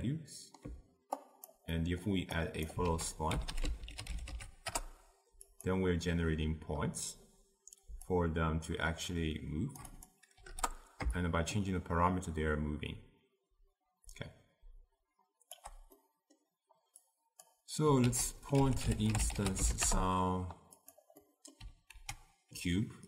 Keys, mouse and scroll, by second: 4.8 l, 8.3-14.3 shift+drag, 19.9 ctrl+a.